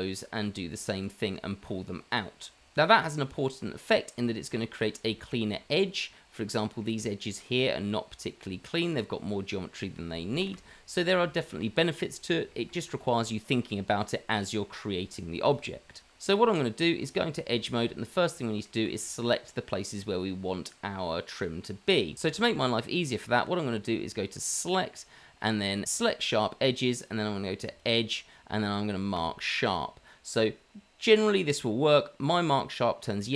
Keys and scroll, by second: 2.6 Tab, 4.1 Tab, 5.6 Tab, 8.4 Tab, 10.5 Delete, 11.6 Delete, 12.7 Delete, 16.2 Tab, 17.8 Tab.